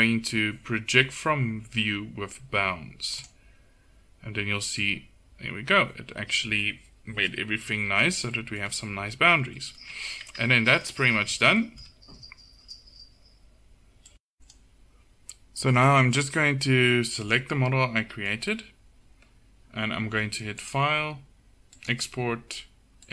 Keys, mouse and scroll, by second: 10.5 middle click, 11.0 Tab, 17.3-19.8 middle drag.